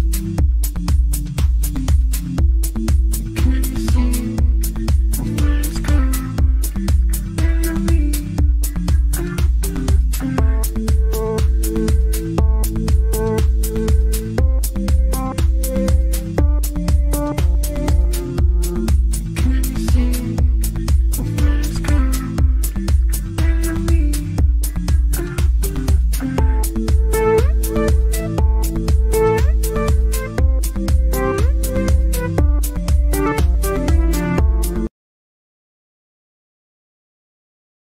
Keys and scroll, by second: 9.4 F3, 10.0 Escape, 27.1 F3, 27.3 Escape.